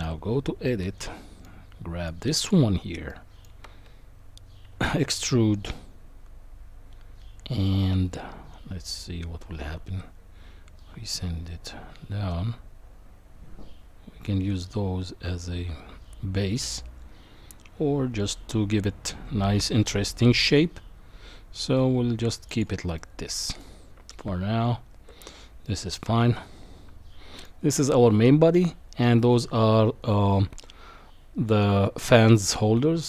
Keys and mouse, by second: 0.7 middle click, 2.2 click, 3.1 middle click, 4.7 e, 23.0 middle click, 24.0 Tab, 25.7-27.4 middle drag.